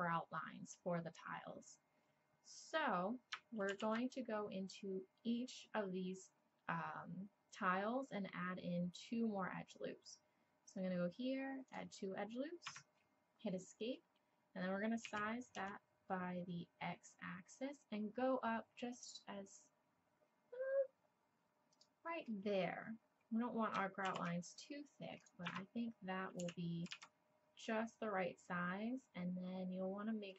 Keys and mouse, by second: 3.7 ctrl+r, 15.1 s, 24.1 ctrl+r, 26.4 s.